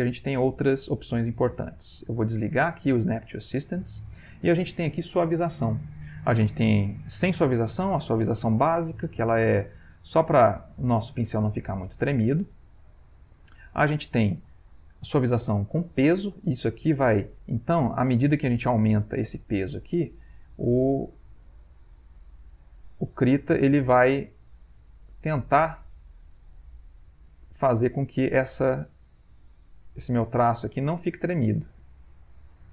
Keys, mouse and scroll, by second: 1.2-2.4 scroll up 1, 2.6 click, 6.5 click, 6.9-8.5 drag, 9.2-10.2 drag, 10.5-11.7 ctrl+middle drag, 12.5 click, 13.8 click, 16.0 middle click, 16.6-18.0 scroll up 1, 18.4-19.4 drag, 20.4-32.7 drag.